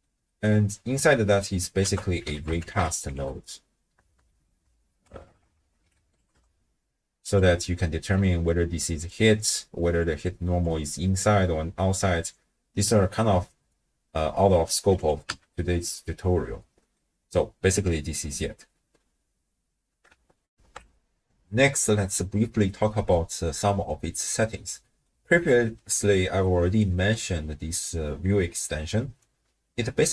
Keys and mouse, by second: 0.0 click, 0.1 middle click, 0.2 click, 0.4 middle click, 1.1 click, 1.9 ctrl+a, 4.1 Down, 5.2 BackSpace, 5.3 BackSpace, 5.6 BackSpace, 7.6 click, 8.2-11.9 d, 8.4 click, 10.0 click, 13.3 d, 13.5-14.7 drag, 14.7 d, 14.8 d, 15.0 click, 15.2 x, 16.0 middle click, 16.5 click, 16.9 right click, 20.5 ctrl+alt+shift+w, 20.6 ctrl+alt+shift+q, 24.6-25.1 middle drag, 26.5 middle click, 29.2-30.1 drag.